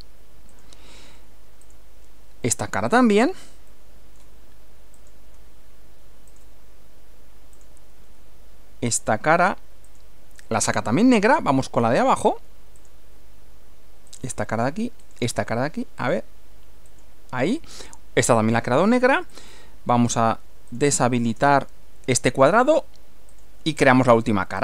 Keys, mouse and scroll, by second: 0.5 ctrl+click, 1.6 click, 2.5 middle click, 3.7 middle click, 4.9 click, 6.3 ctrl+click, 7.5 ctrl+click, 9.0 ctrl+click, 9.9 ctrl+click, 10.7-12.3 middle drag, 12.7 click, 14.1 ctrl+click, 15.0 ctrl+click, 16.0 ctrl+click, 16.9 ctrl+click, 17.8 middle click, 19.3 click, 20.7 click, 21.3 space, 23.3 click.